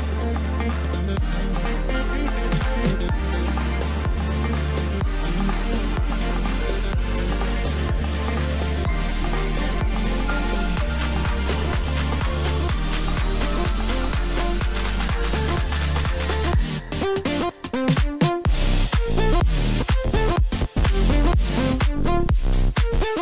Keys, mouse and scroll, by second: 2.0-3.9 middle drag, 3.9 shift+click, 5.5 ctrl+j, 6.8 Tab, 7.7 KP_7, 9.2 click, 9.7-10.8 scroll down 5, 10.8 KP_1, 14.1 click, 15.1 g.